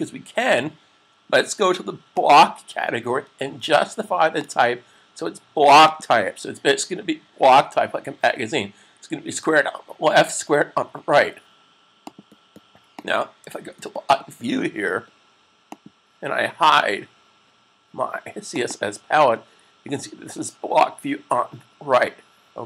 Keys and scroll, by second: 13.4 super+s.